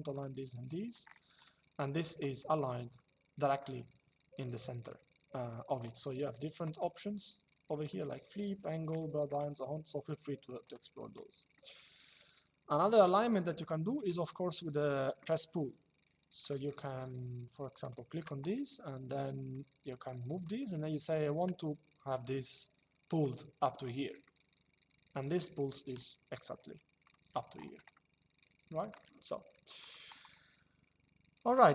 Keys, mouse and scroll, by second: 1.1 shift+middle click, 2.7 shift+middle click, 4.5 click, 6.5 shift+middle click, 8.7 shift+middle click, 10.3 click, 11.2 shift+middle click, 13.3 click, 16.1 click, 17.5 click, 19.2 click, 22.9 click, 23.9 shift+middle click, 26.7 click, 27.7 middle click, 29.5 click.